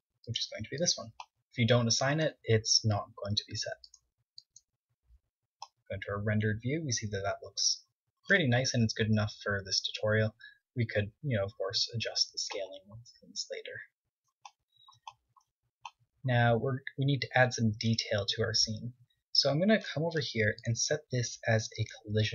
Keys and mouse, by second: 1.8 Tab, 3.4 drag, 4.2-5.1 drag, 9.1-11.6 middle drag, 11.6 z, 12.1 middle click, 12.8 KP_1, 18.0 KP_1, 19.3-21.3 middle drag, 21.3-22.3 drag.